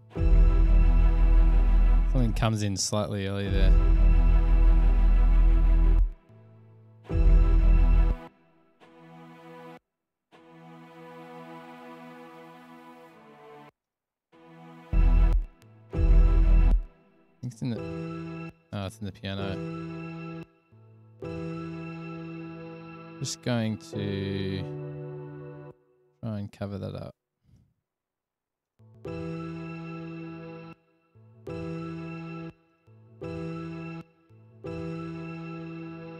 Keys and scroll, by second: 2.5 space, 2.8 space, 6.1 space, 6.3 space, 8.3-8.6 typing, 9.9 space, 10.1 space, 10.6 super+], 10.7 super+], 13.6-15.6 typing, 17.6 s, 17.7 space, 18.6 space, 20.6 space, 20.7 space, 24.3 super+c, 28.1 alt+super+v, 28.9 space, 30.7-31.0 typing, 32.4-34.7 typing.